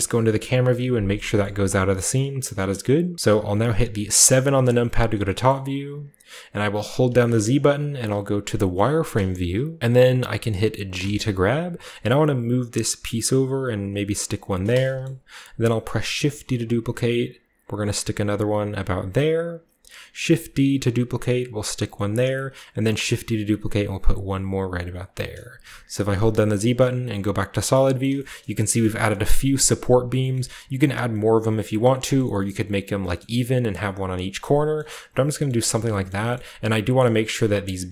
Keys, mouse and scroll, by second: 0.1 KP_0, 1.3 middle click, 1.5-2.2 scroll up 1, 2.2-2.7 scroll up 1, 2.7 middle click, 4.2 KP_7, 5.4-6.8 shift+middle drag, 5.5-6.8 shift+scroll up 1, 6.8-8.1 drag, 6.8-7.7 scroll up 1, 7.1 z, 7.7 z, 7.7 z, 8.7-9.8 middle drag, 9.3 KP_7, 9.8-10.9 drag, 9.8-10.9 scroll up 1, 9.8 z, 10.9 scroll up 1, 10.9 g, 14.3 click, 14.9 shift+middle click, 14.9-16.1 shift+scroll up 1, 16.2 shift+d, 19.1 click, 20.1 shift+d, 22.0 click, 22.2 shift+middle click, 22.8 shift+d, 24.9 click, 25.1-27.2 typing, 27.3-27.7 scroll down 1, 27.9 shift+middle click, 27.9-28.3 scroll down 2, 28.2 shift+middle click, 28.7 middle click, 28.9-30.0 scroll down 1, 29.0 middle click, 29.0 typing, 30.0 middle click, 30.2-31.0 scroll up 1, 30.3 middle click, 31.0-31.8 scroll up 1, 31.8 middle click, 32.1 middle click, 35.8-37.9 shift+scroll up 3, 35.9-37.9 typing.